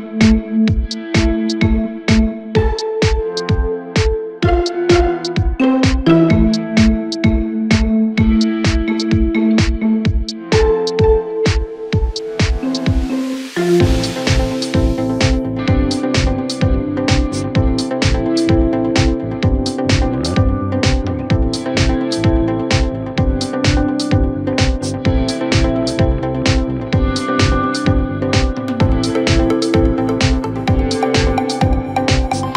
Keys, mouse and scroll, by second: 6.7-7.1 scroll down 2, 7.1-8.9 middle drag, 8.9-9.9 drag, 9.9-11.0 scroll up 1, 11.0 e, 16.1 e, 18.1 Tab, 18.2-19.1 scroll down 3, 19.1 KP_1, 20.2-20.5 scroll up 2, 20.5-20.9 scroll down 2, 20.9 Tab, 21.5-22.9 scroll up 1, 22.9 ctrl+r, 25.1 click, 26.7 s, 30.1 ctrl+b.